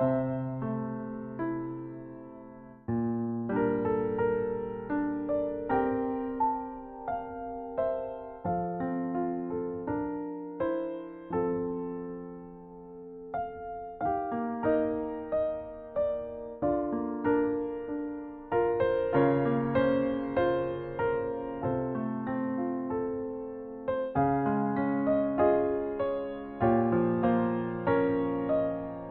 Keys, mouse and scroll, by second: 1.8 click, 3.5 scroll up 2, 3.7-4.0 scroll down 1, 4.6-5.1 scroll up 3, 6.2 click, 7.6 scroll up 1, 7.7 scroll down 1, 9.6 b, 14.0 Delete, 16.0-16.9 scroll down 4, 16.6 scroll up 1, 17.2-17.7 scroll down 1, 17.7-18.0 scroll down 1, 19.3 click, 19.3 scroll down 2, 19.9 Delete, 21.0-21.4 scroll down 2, 22.3-22.9 scroll down 4, 23.7 click, 25.5 right click.